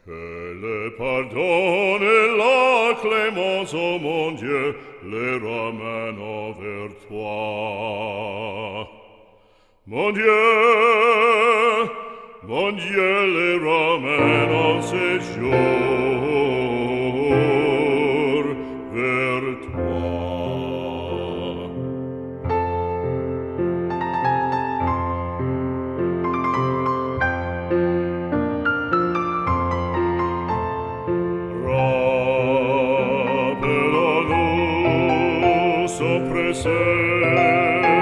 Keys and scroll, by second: 22.2 ctrl+-, 32.1 ctrl+alt+z, 34.4 z.